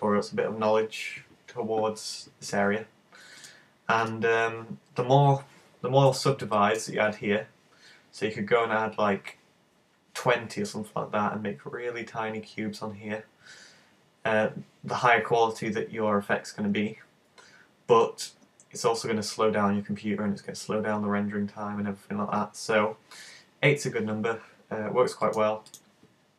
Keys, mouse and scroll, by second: 3.4 click, 4.6 click, 6.6 middle click, 25.3 click.